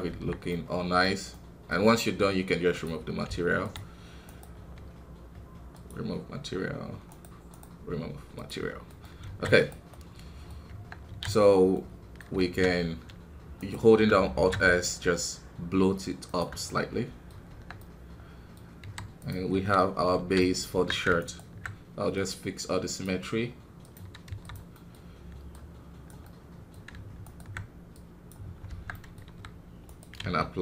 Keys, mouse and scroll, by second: 0.0 Tab, 0.4-2.7 middle drag, 2.7 click, 3.2 z, 4.2-8.3 right drag, 8.3 click, 9.2 alt+a, 9.5 right click, 10.1 middle click, 10.6 Tab, 11.7 middle click, 12.4 alt+s, 16.6 middle click, 17.4 Tab, 17.7-18.8 middle drag, 18.8 w, 19.5 KP_1, 19.9 scroll down 2, 20.1 alt+a, 20.3 middle click, 20.5 scroll up 1, 20.7 Tab, 21.1-23.8 alt+right drag, 23.8 click, 24.7 middle click, 24.9 scroll up 1, 25.5 click, 26.2-28.5 middle drag, 28.5 scroll down 2, 28.6 Tab, 28.9 middle click, 29.2-29.8 scroll up 1, 29.8-30.6 right drag.